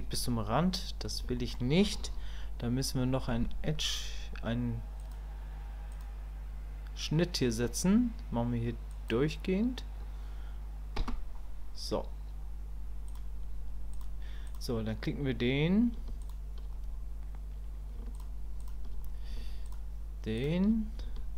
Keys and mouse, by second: 1.4 shift+click, 13.1 click, 14.5 click, 16.2 shift+click, 18.6 shift+click, 21.2 shift+middle click.